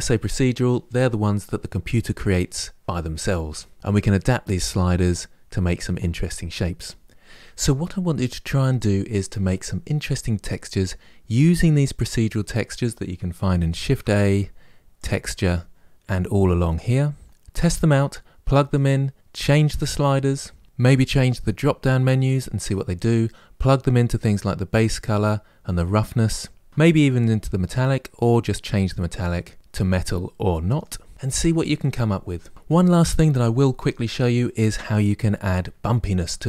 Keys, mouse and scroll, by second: 7.1-11.2 middle drag, 11.2 click, 19.5-30.0 drag.